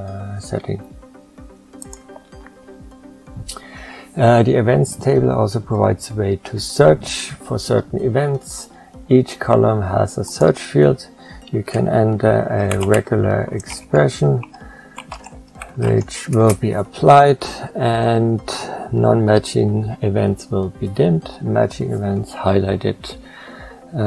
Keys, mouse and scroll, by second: 13.6 shift+-, 14.3 s.